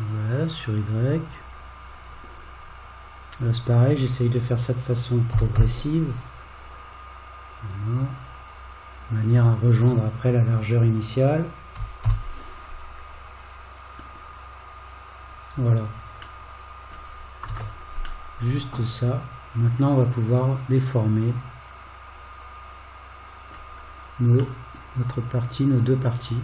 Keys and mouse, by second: 3.0 click, 5.4 g, 9.0 click, 11.8 g, 16.5 middle click, 18.4-23.5 middle drag, 24.7-26.4 middle drag.